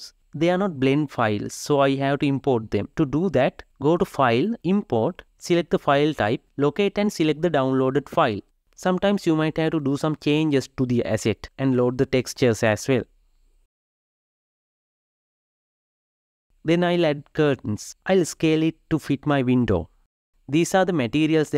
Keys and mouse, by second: 9.1 KP_Divide, 9.6-10.3 middle drag, 10.3 click, 10.6 g, 12.9 g, 13.6 g, 16.6 s, 21.3 Tab.